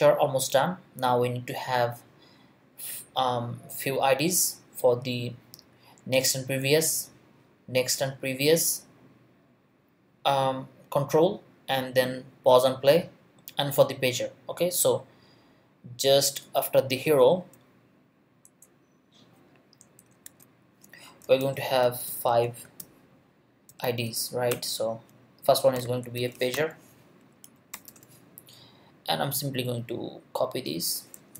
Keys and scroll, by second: 18.4 Return, 20.0 Return, 20.2 Tab, 21.2-24.4 typing, 24.5 Return, 25.5-27.9 typing, 27.4 Right, 31.1 super+c.